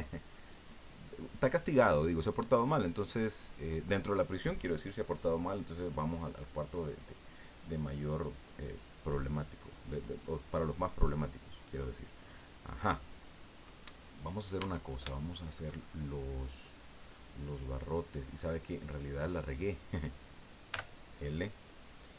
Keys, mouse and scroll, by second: 14.1 right click, 14.5 Tab, 15.1 shift+click, 15.2 shift+middle click, 15.8 shift+middle click, 16.1-18.5 drag, 19.5 right click, 20.7 l.